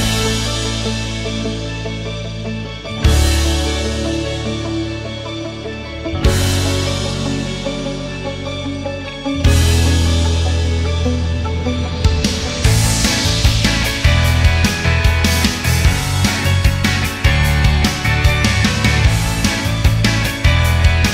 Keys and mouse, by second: 0.5-1.4 middle drag, 3.3 click, 12.1 click, 14.9-16.8 drag, 17.2 KP_0.